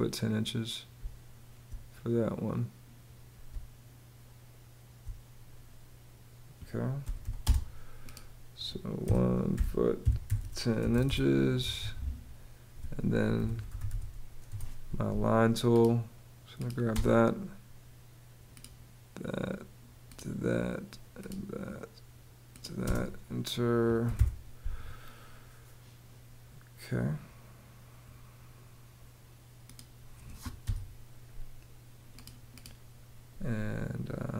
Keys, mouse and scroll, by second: 0.6 space, 3.1 space, 6.4-7.3 typing, 8.4-10.5 typing, 10.7 Return, 11.2 Escape, 12.8-14.0 typing, 14.1 Return, 14.6 Return, 16.5 space, 22.5 space, 23.7 y, 23.8 Home, 24.7 Return, 30.3 BackSpace.